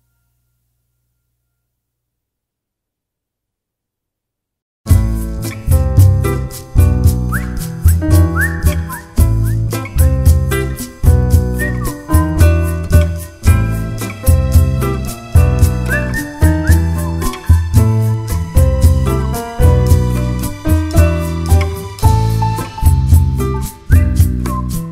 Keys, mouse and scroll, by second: 0.0 `, 0.9 `, 2.2 alt+click, 2.6 `, 3.0 alt+s, 4.4 1, 5.0 click, 5.5 alt+s, 7.6 click, 8.0 alt+s, 8.9 ctrl+z, 9.2 alt+s, 9.8 shift+click, 10.0 `, 10.6 click, 10.8 shift+click, 11.0 alt+s, 11.7 scroll down 1, 11.8-14.6 typing, 12.3 alt+a, 14.3 click, 16.7 click, 17.3 e, 18.3 `, 19.2 click, 19.6 shift+click, 19.7 f, 19.9 `, 20.8 click, 21.7 shift+click, 21.8 f, 22.0 click, 22.4 shift+click, 22.6 f, 23.1 click, 23.8 shift+click, 24.0 f, 24.4 ctrl+r.